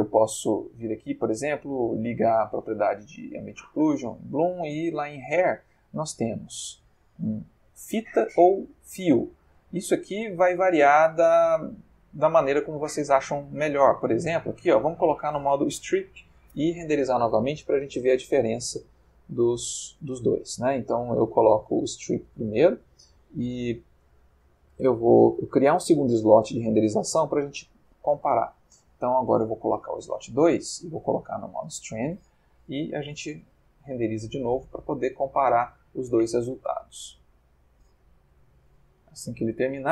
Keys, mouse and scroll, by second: 1.6 click, 3.4 click, 4.8 click, 12.3 click, 13.6 click, 14.5 click, 15.9 F12, 29.2-30.4 drag, 31.5 click, 32.7 F12.